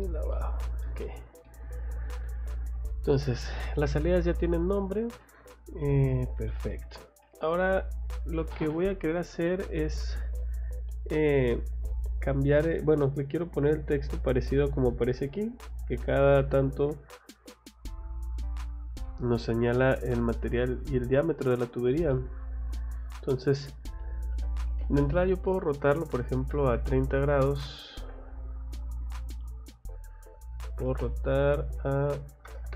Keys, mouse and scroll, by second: 0.0 click, 1.4 middle click, 2.5 scroll up 2, 4.2 scroll down 2, 5.2 middle click, 6.5 scroll down 2, 7.2 middle click, 10.8 scroll up 2, 12.6 scroll down 2, 14.2 scroll up 2, 17.8 scroll up 2, 19.0 middle click, 19.4 middle click, 20.1 scroll up 2, 21.7 scroll down 2, 22.1 middle click, 23.1 click, 24.3 r, 24.7 o, 24.8 space, 25.1 click, 28.1 ctrl+z, 28.8 click, 29.1 click, 30.2 r, 30.6 o, 31.3 click.